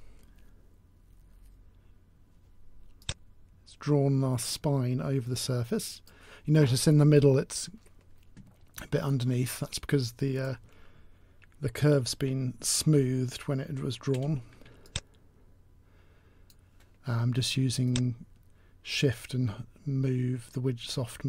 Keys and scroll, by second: 12.8 t.